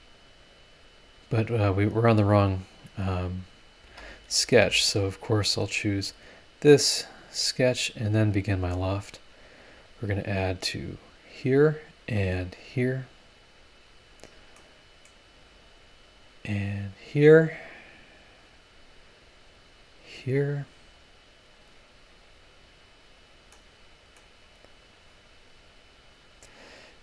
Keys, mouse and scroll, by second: 1.6 click, 2.2 scroll up 1, 2.8 scroll down 1, 3.2 click, 3.7 click, 3.8 space, 4.2 scroll up 2, 4.5 space, 4.9-5.2 scroll up 2, 5.9 click, 8.4 click, 9.7 click, 11.0 click, 12.0 click, 13.6 click, 14.1 scroll down 1, 14.6 middle click, 16.0 click, 16.9 click, 18.3 click, 19.8 click, 21.5 click, 23.0 click, 23.5 middle click, 24.9 click, 26.3 click.